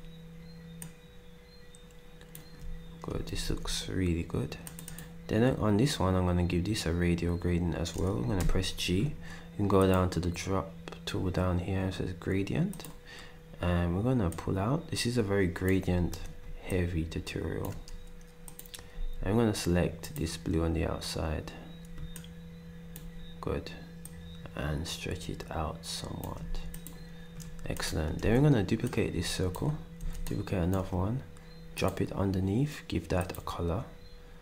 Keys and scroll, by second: 3.4 s, 8.4 g, 19.1 d, 26.4 s, 28.2 d, 30.0 d.